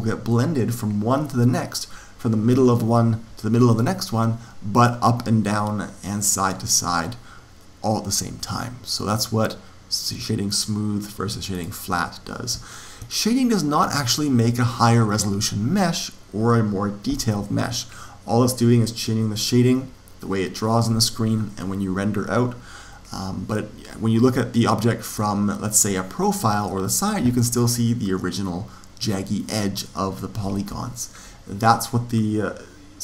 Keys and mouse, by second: 10.4-13.5 drag, 13.1-15.1 middle drag, 25.6 click.